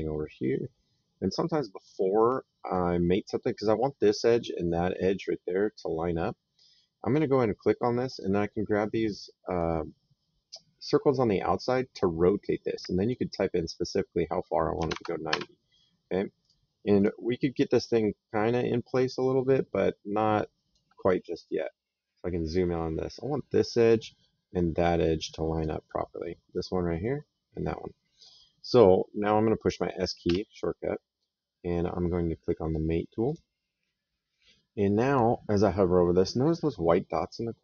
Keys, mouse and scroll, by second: 6.9 click, 11.1 click, 14.6 KP_9, 14.7 KP_0, 15.1 Return, 15.1 KP_Enter, 16.2 click, 18.2 click, 22.4 middle click, 25.4 click, 28.0 click, 30.1 s, 33.1 click.